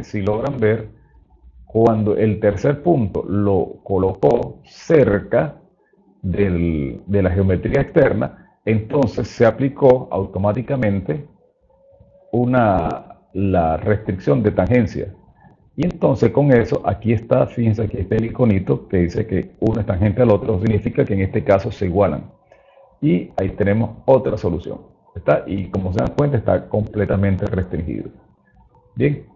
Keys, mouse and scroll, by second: 26.5 click, 27.8 click, 29.2 click.